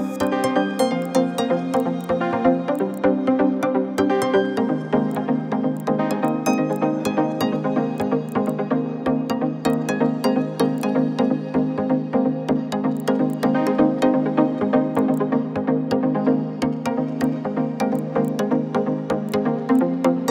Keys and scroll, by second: 4.0 ctrl+-, 4.1 ctrl+-, 4.1 ctrl+-, 4.3 ctrl+-, 4.4 ctrl+-, 4.5 ctrl+-.